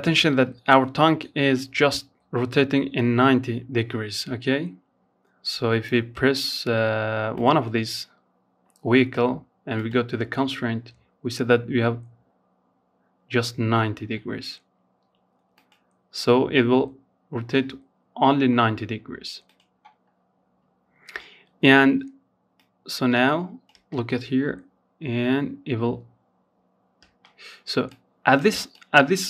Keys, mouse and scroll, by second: 5.5 click, 7.9 click, 8.6-11.7 scroll down 4, 13.7 click, 17.6 click, 20.7-21.9 drag, 21.9 space, 25.2 space, 26.0 click, 26.9-29.2 drag.